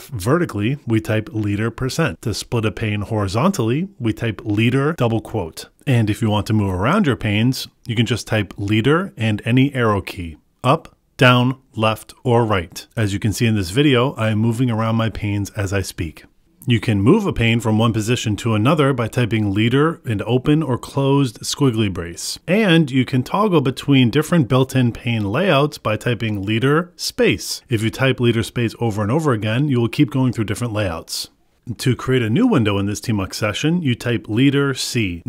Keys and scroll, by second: 3.1 ctrl+b, 8.7 ctrl+b, 9.2 Up, 10.8 ctrl+b, 11.3 Left, 12.9 ctrl+b, 13.7 Right, 16.2 Return, 18.5 Up, 18.6 ctrl+b, 21.9 ctrl+b, 23.0 ctrl+b, 23.9 ctrl+b, 24.8 ctrl+b, 26.5 ctrl+b, 28.2 ctrl+b, 29.4 ctrl+b, 30.6 ctrl+b, 34.1 ctrl+b.